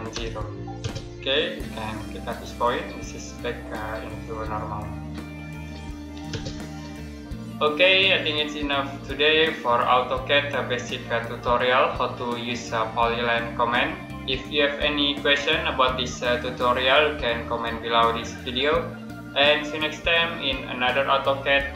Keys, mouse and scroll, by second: 0.0 0, 0.6 space, 2.3 click, 6.2 space.